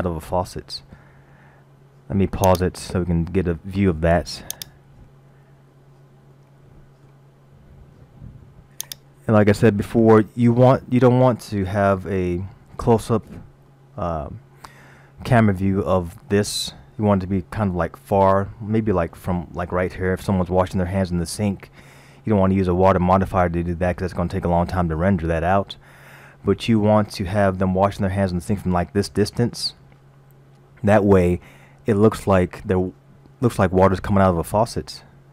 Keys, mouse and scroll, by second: 2.5 click, 4.6 click, 5.9-6.4 scroll up 1, 6.4 middle click, 8.8 click, 10.6-11.6 scroll up 1, 11.6 middle click, 13.8 middle click, 16.0-16.7 scroll up 1, 17.2-18.4 scroll down 4, 18.4 scroll down 1, 19.1 shift+middle click, 19.9-20.8 scroll down 4, 21.2-22.2 scroll down 2, 25.7-26.6 scroll down 1, 26.8-27.7 scroll down 1, 32.2-33.2 scroll up 1.